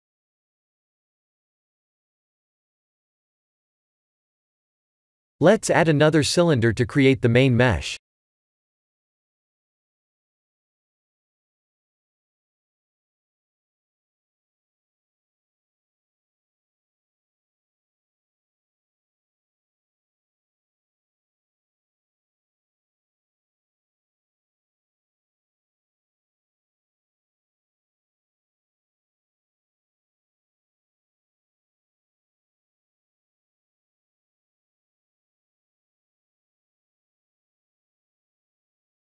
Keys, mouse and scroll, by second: 0.0-1.4 scroll up 2, 1.4 scroll up 2, 2.1 click, 3.0 Tab, 4.0 click, 4.4-5.1 scroll down 1, 5.1 click, 5.1 scroll down 4, 5.8 shift+a, 8.6 s, 9.6 g, 11.9 shift+z, 12.2-13.7 scroll up 7, 13.7 s, 18.6 Tab, 20.0 shift+z, 20.2 3, 20.7 click, 21.5-21.9 scroll down 5, 21.9 shift+middle click, 22.9 g, 25.7 e, 27.4 e, 28.3 s, 29.7 e, 32.5 e, 34.8 ctrl+z, 35.1 ctrl+z, 35.8 e, 37.9 s.